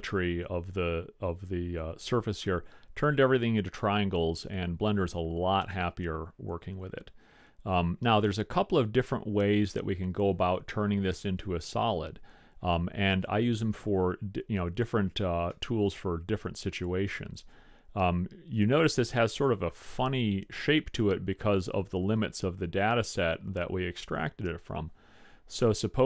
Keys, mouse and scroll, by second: 7.4-12.5 middle drag, 15.6-17.6 middle drag, 21.2-23.4 middle drag, 25.7 middle click.